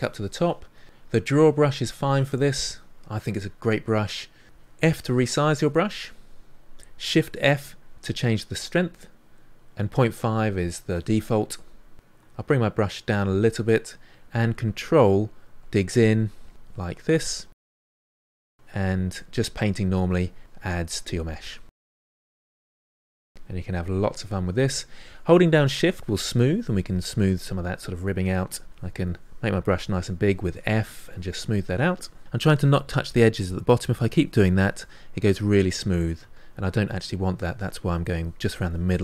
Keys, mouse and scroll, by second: 1.8-3.9 drag, 3.9 middle click, 4.9 f, 7.2 shift+f, 12.2 f, 14.7-19.1 ctrl+drag, 19.1 middle click, 19.4-21.4 drag, 21.4 middle click, 21.7 ctrl+click, 22.5 middle click, 22.8 click, 23.4 middle click, 24.1 shift+click, 24.7 middle click, 25.2-27.3 shift+drag, 27.3 middle click, 28.2 f, 28.7 shift+click, 29.1 middle click, 29.2 shift+click, 29.6 middle click, 29.7 shift+click, 30.1 middle click, 30.3 shift+click, 30.9 middle click, 31.1 shift+click, 31.4-33.1 middle drag, 33.1-34.9 shift+drag, 34.9-36.3 middle drag, 36.3 ctrl+z, 36.7 middle click, 36.9 shift+click, 37.6 middle click, 37.8 shift+click, 38.2 middle click, 38.5 shift+click, 38.9 middle click.